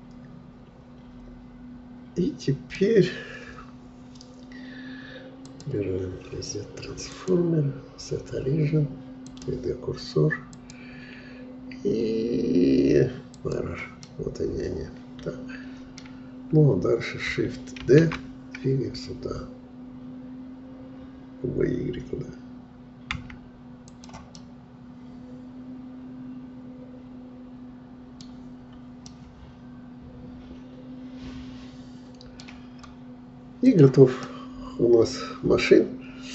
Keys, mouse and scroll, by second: 5.5-13.6 drag, 14.0-17.1 middle drag, 17.9 shift+d, 24.4-27.4 middle drag, 28.3-29.1 scroll down 2, 29.1-32.1 middle drag, 32.8-33.4 scroll up 2, 33.7 click, 34.2-36.3 middle drag.